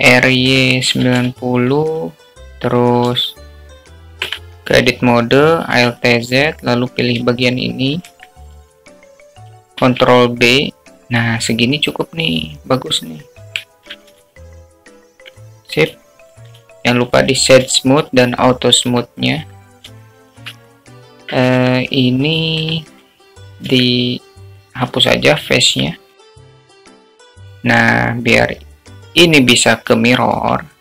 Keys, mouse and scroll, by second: 1.5 r, 3.0-4.1 drag, 6.3 Tab, 7.8 alt+z, 8.4-10.1 drag, 10.9 ctrl+b, 15.4 Tab, 16.1 alt+z, 16.4-17.4 alt+middle drag, 18.0 right click, 19.8 q, 20.9 `, 22.0-22.4 shift+middle drag, 23.0-23.4 middle drag, 23.5 Tab, 24.6 3, 24.8 click, 25.9 x, 26.7 middle click, 27.1 Tab, 27.6 `.